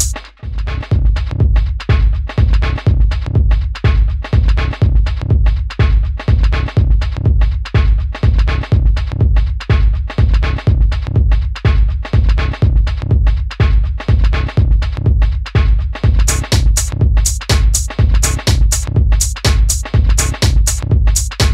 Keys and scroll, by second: 2.1 super+d, 12.1 super+d, 14.7 super+d, 15.3 Down, 15.4 Down, 15.5 Down, 15.6 Down, 16.9 Down.